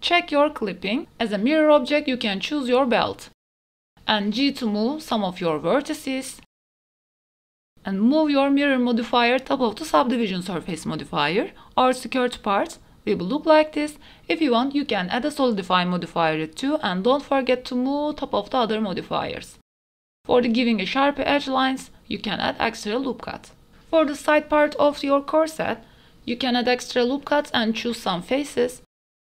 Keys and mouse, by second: 0.6 middle click, 1.1 middle click, 1.5 Tab, 1.6 middle click, 2.7 ctrl+KP_1, 2.7 e, 4.4 click, 5.1 g, 5.3 x, 6.6-7.7 typing, 6.9 shift+middle click, 7.4 shift+middle click, 7.5 ctrl+z, 7.5 Tab, 8.5 middle click, 10.6 middle click, 11.4 middle click, 12.1 middle click, 12.9 Tab, 13.1 Tab, 13.3 middle click, 13.5 g, 13.7 z, 14.1 click, 14.3 Tab, 14.3 middle click, 14.7 click, 15.1 middle click, 15.5 middle click, 16.1 ctrl+s, 16.7-17.9 drag, 19.0 click, 20.3 middle click, 20.8 middle click, 21.3 middle click, 21.5 middle click, 21.9 Tab, 21.9 ctrl+r, 22.5 click, 22.6 Tab, 22.9 middle click, 23.3 middle click, 23.6 middle click, 24.3 Tab, 24.6 middle click, 24.9 Tab, 24.9 middle click, 25.3 middle click, 25.7 ctrl+r, 26.9 g, 27.0 g, 27.6 click, 28.3 g, 28.4 g, 28.6 middle click, 29.0 shift+middle click.